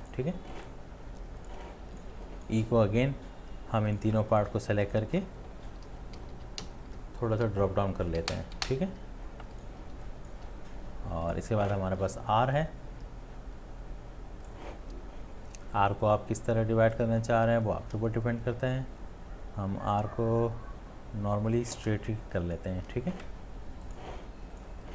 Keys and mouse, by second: 2.1 space, 4.4 space, 4.4 shift+click, 4.9 shift+click, 5.7 Down, 5.9 Down, 6.2 Down, 6.3 Down, 6.6 Down, 8.6 Down, 22.5 shift+click.